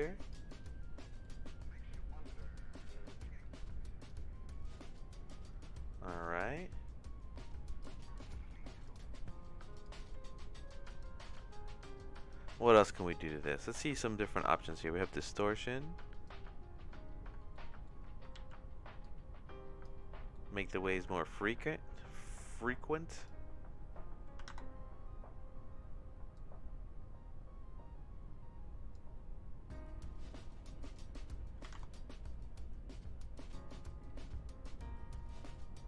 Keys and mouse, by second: 1.2 middle click, 2.4-4.1 drag, 4.9 click, 6.2 middle click, 7.8 click, 8.2 click, 9.8 click, 10.0 x, 13.0 middle click, 14.3 middle click, 15.1-16.3 drag, 17.5 middle click, 18.4 ctrl+z, 19.0 click, 20.3 middle click, 21.0 ctrl+z, 22.1 middle click, 23.1-25.1 drag, 26.3-28.9 drag, 30.8-32.1 drag, 32.9-35.8 drag.